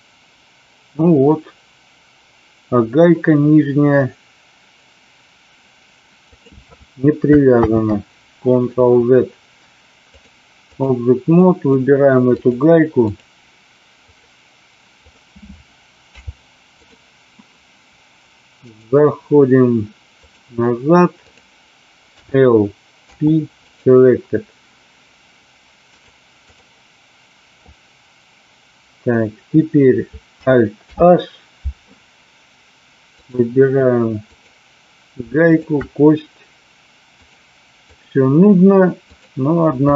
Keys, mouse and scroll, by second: 6.2 click, 7.7 ctrl+z, 10.0 click, 11.4 middle click, 12.4 click, 14.0 click, 14.9 click, 16.0 h, 16.8 click, 18.8-20.4 drag, 21.2 click, 22.2 l, 23.0 p, 26.0-26.6 drag, 30.9 alt+h, 33.1 click, 34.2 click, 35.4 shift+click, 37.1 click, 39.0 click.